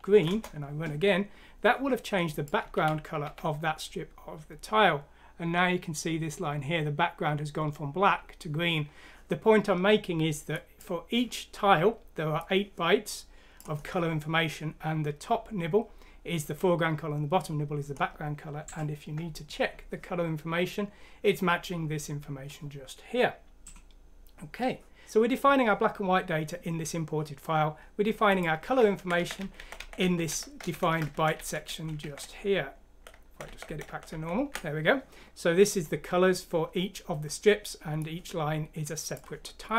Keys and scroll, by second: 0.1 F6, 0.2 Return, 2.7-3.2 typing, 28.8 ctrl+z, 29.0-36.4 typing.